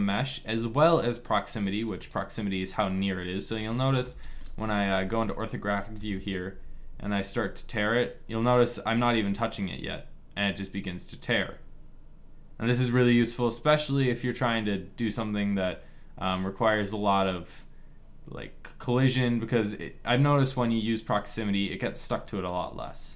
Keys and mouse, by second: 2.0-3.4 drag, 3.4 middle click, 4.3 KP_1, 5.7 KP_5, 6.6 g, 21.2-22.9 drag.